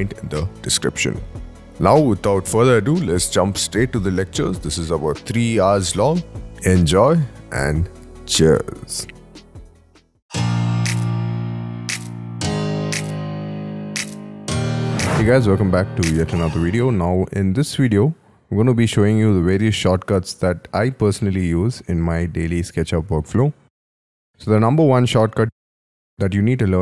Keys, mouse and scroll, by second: 1.8 scroll up 10, 2.0-6.4 typing, 2.1 middle click, 3.4 double click, 4.4 middle click, 4.5 middle click, 4.6 scroll up 5, 5.1 shift+click, 5.2 shift+scroll up 1, 5.3 shift+middle click, 5.3 scroll down 1, 5.5 shift+click, 5.6 middle click.